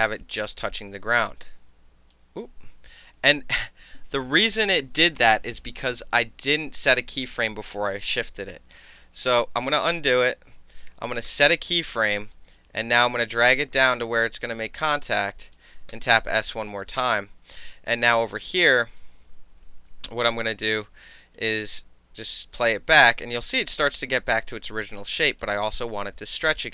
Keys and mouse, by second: 0.5 w, 1.5 click, 9.0 ctrl+z, 11.3 ctrl+s, 12.3-15.5 drag, 15.9 ctrl+s, 17.0 space, 18.2 space, 19.0-20.5 alt+drag, 21.4-25.4 drag.